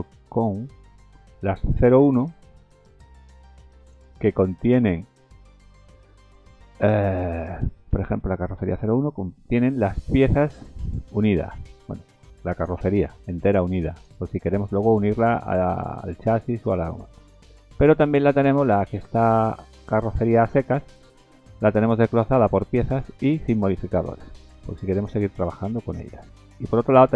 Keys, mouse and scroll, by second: 1.3 scroll up 2, 1.9 click, 2.3 right click, 4.2-4.9 scroll up 6, 6.1-6.7 scroll down 2, 8.0 scroll up 1, 9.8 click, 10.6 click, 12.5 click, 13.9 click, 17.2 click, 18.3 click, 19.7 click, 21.2-22.5 scroll down 8, 22.5 scroll down 1, 23.5-24.9 scroll up 5, 24.9 click, 25.4-26.0 scroll down 6.